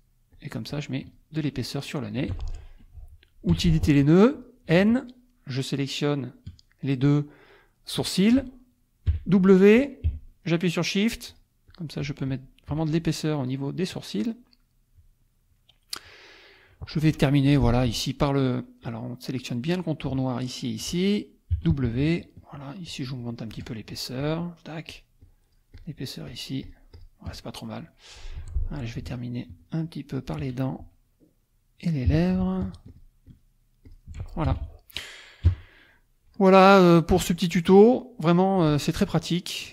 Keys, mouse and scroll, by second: 0.3 shift+click, 0.7 shift+click, 3.5 n, 4.3 click, 5.0 shift+click, 9.1 w, 11.3 shift+click, 11.7 shift+click, 13.2-14.6 shift+drag, 14.9 middle click, 15.2-16.7 drag, 17.5 F2, 18.0 click, 18.8 click, 19.7 click, 20.5 shift+click, 21.5 w, 22.5 shift+click, 23.3 shift+click, 23.9 shift+click, 24.9-26.1 shift+drag, 26.3 shift+click, 26.6 shift+click, 27.5 shift+middle click, 27.7 shift+click, 28.4 F2, 28.7 shift+click, 29.1 shift+click, 29.6 shift+click, 30.1 shift+click, 32.1 w, 32.9 shift+click, 33.3 shift+click, 33.9 shift+click, 34.5 shift+F1, 34.6 shift+click, 35.5 KP_Subtract, 36.6 click, 37.1 click, 37.9 click.